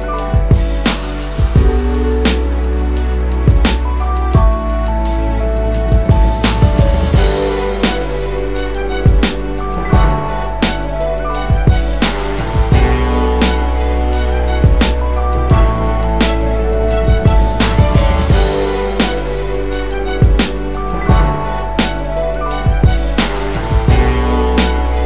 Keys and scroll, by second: 1.7 w.